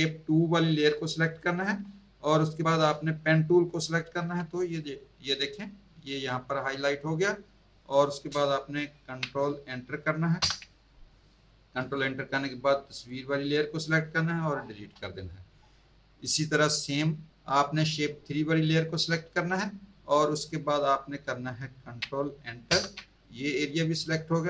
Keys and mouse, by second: 4.2 p, 10.4 ctrl+Return, 12.9 click, 14.8 Delete, 18.7 click, 22.7 ctrl+Return.